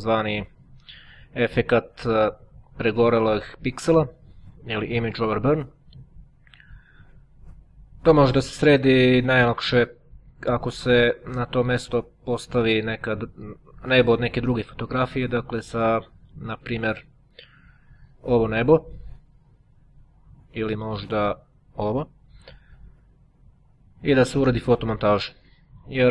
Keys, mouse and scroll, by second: 14.7-16.1 drag, 18.9 click, 19.6 click.